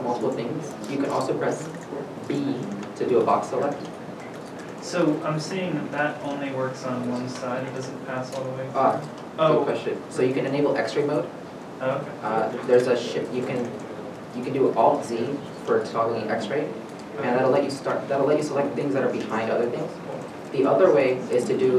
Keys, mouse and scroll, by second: 2.7 b, 5.4 b, 5.5 alt+a.